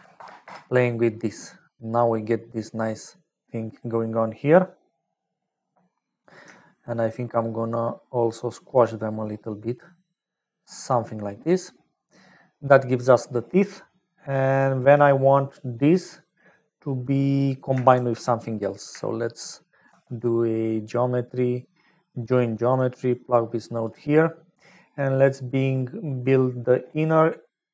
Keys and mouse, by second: 1.6-2.7 middle drag, 6.9-8.7 shift+drag, 9.2-10.8 middle drag, 11.6 middle click, 12.5 click, 18.7 click, 19.8 shift+a, 23.0 click.